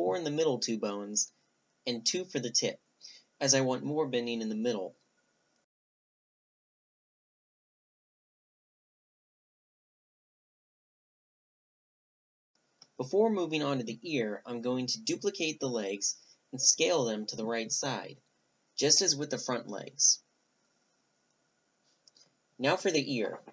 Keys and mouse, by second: 0.1-1.9 middle drag, 1.9-3.7 drag, 3.7 right click, 4.4-6.5 drag, 6.8-8.9 drag, 9.1 click, 9.8 Tab, 10.3-11.5 drag, 11.5-14.2 middle drag, 13.3 Tab, 13.6 right click, 14.0 b, 14.4-14.8 drag, 15.3 click, 15.5 shift+c, 16.1 middle click, 16.4 click, 16.9 middle click, 16.9 s, 18.1 shift+d, 18.2 s, 19.9 click, 20.0 middle click, 20.3 a, 20.4 g, 21.5-23.3 middle drag.